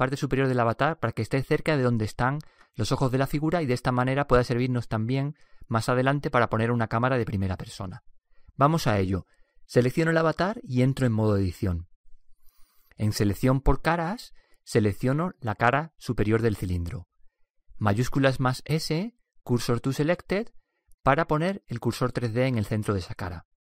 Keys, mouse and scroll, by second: 11.0 Tab, 13.5-15.4 drag, 15.3-19.1 right drag, 19.1 shift+s.